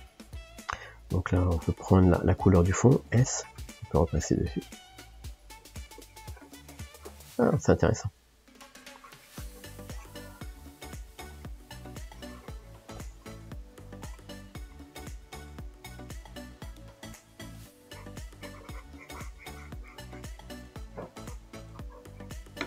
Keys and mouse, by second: 1.4 f, 3.4-5.1 drag, 5.1 middle click, 5.6-7.9 drag, 7.9-9.0 middle drag, 9.0-10.3 drag, 10.3-12.1 middle drag, 12.1 click, 12.9-16.0 middle drag, 16.0 f, 17.9-22.3 drag.